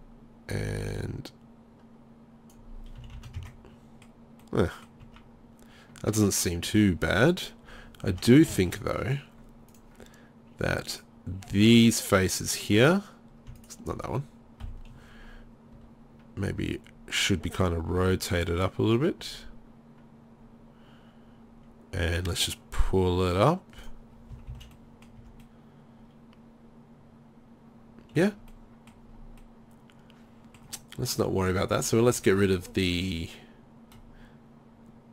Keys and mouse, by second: 0.1 click, 0.5-2.5 middle drag, 2.8 middle click, 3.0 z, 3.4 Tab, 3.4 z, 5.1 Tab, 6.7 Tab, 8.1 Tab, 14.6 KP_3, 15.8 r, 18.0 g, 23.9 drag, 24.1 middle drag, 24.3 click, 24.3 z, 24.5 z, 25.2 Tab, 27.4-27.7 middle drag, 29.2 middle drag, 29.6-30.0 middle drag.